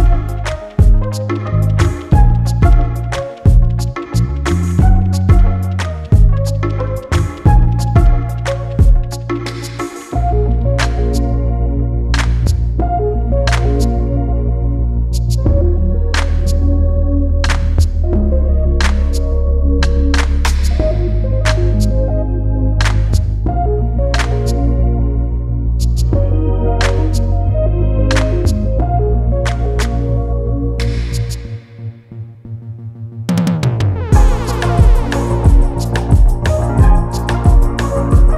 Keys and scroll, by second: 6.3 ctrl+t, 8.5 Return, 10.0 ctrl+t, 25.9 Return, 36.1 Up, 36.7 Up, 36.9 Up, 37.1 Up, 37.2 Up, 37.6 Up.